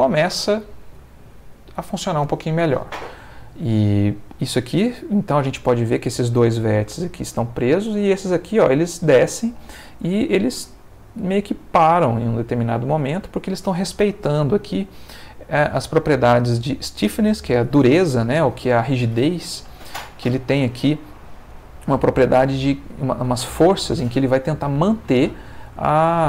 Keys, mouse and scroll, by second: 1.0-2.0 middle drag, 3.4 middle click, 10.7 middle click, 12.1 middle click, 24.8-26.0 middle drag.